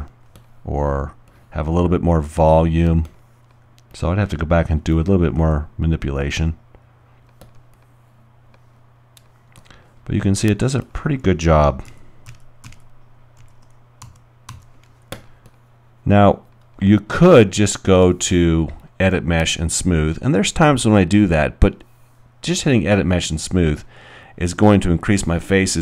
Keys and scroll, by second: 5.4 alt+w, 11.9-14.5 typing, 16.5 alt+g.